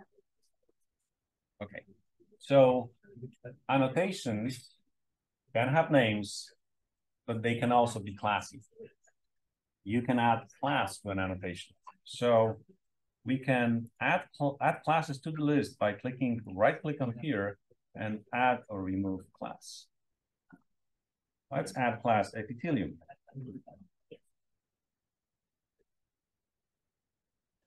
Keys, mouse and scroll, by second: 16.4-18.0 drag, 20.4 click, 21.8-26.2 typing.